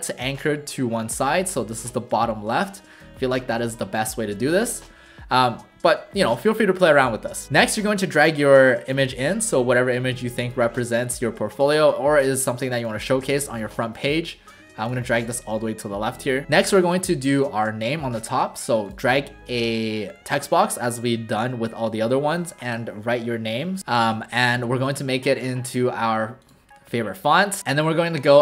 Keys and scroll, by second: 11.6 ctrl+alt+shift+c, 16.4 w, 23.6 Caps_Lock, 23.8 typing, 24.6 ctrl+a.